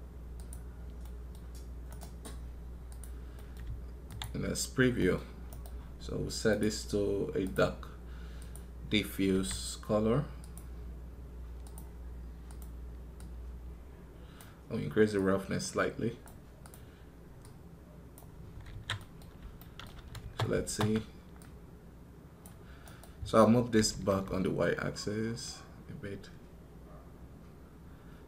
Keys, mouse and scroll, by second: 5.3 right click, 22.7 right click.